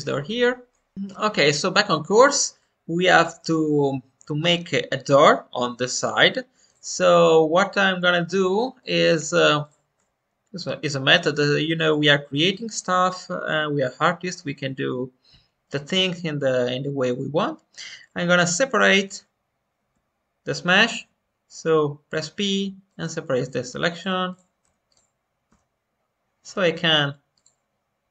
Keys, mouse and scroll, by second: 0.6 middle click, 2.5-3.7 shift+middle drag, 6.3 scroll up 1, 6.6 click, 6.9 Tab, 8.7-11.8 drag, 19.0-23.9 right drag, 20.9 p, 23.9 click, 24.6 Tab, 24.8 click, 25.4 Tab, 27.3 click.